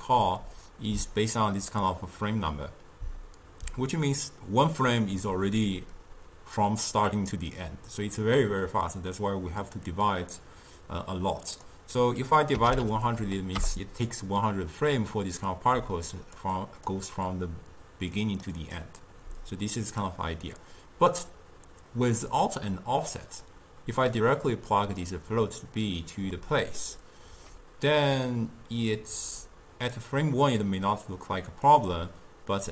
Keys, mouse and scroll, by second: 1.8-4.9 middle drag, 11.6-12.9 drag, 12.9 0, 15.9-19.3 typing, 16.2 click, 16.7 click, 18.3 click, 18.7 click, 20.6 d, 20.7 click, 24.2-26.5 drag, 26.5-29.5 middle drag, 29.5-32.7 drag.